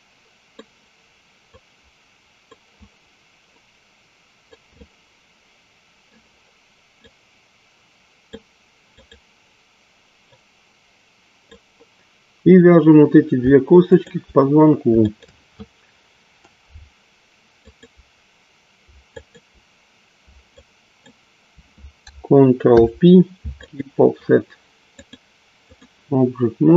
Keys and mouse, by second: 1.4 click, 3.5 click, 4.8-6.7 middle drag, 8.2 click, 8.9 click, 10.3-11.5 drag, 15.1 shift+click, 17.7 shift+click, 19.2 shift+click, 20.4 shift+click, 22.5 ctrl+p, 24.8-25.8 drag.